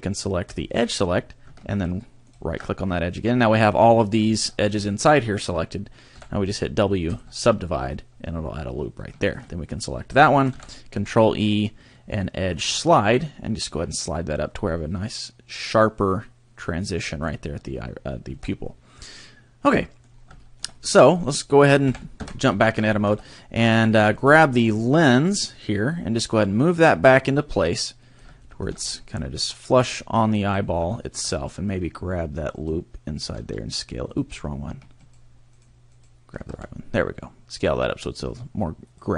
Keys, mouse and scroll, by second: 0.5 click, 2.3 alt+shift+right click, 3.1 middle click, 4.4 middle click, 6.1 w, 9.3 alt+right click, 10.5 ctrl+e, 17.2 click, 18.0-18.3 scroll down 3, 18.3 Tab, 18.6 middle click, 20.1 scroll down 1, 20.5 shift+middle click, 20.7 middle click, 21.2 right click, 21.8 KP_3, 22.2 Tab, 22.8 a, 23.0 b, 23.9 shift+middle click, 25.9 click, 28.4 shift+middle click, 28.8 scroll up 3, 29.6 click, 30.7 scroll down 1, 31.0 shift+middle click, 31.3 scroll up 1, 32.6 alt+right click, 33.4 s, 34.2 right click, 35.0 alt+right click, 35.6 alt+right click, 36.0 right click, 36.4 s, 39.0 click.